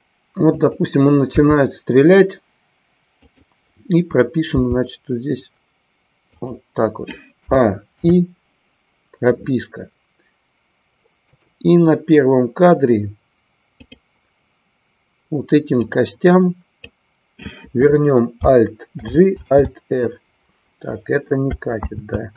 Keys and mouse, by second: 11.3 click, 13.8-14.9 drag, 15.9-17.0 drag, 19.0 alt+g, 21.9 ctrl+z.